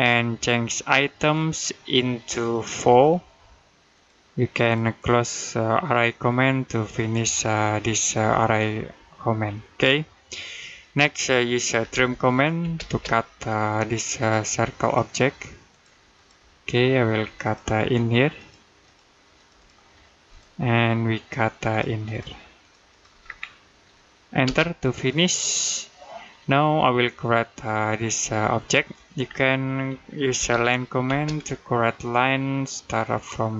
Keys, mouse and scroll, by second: 2.7 4, 3.7 click, 9.3 middle click, 11.6 t, 12.4 space, 13.2 scroll up 1, 14.0 click, 20.4 middle click, 21.5 click, 23.1-23.4 scroll down 1, 23.4 middle click, 24.3 space, 24.7 middle click, 29.1-29.5 scroll down 1, 29.5 middle click, 30.2 l, 30.9 space, 33.4 click.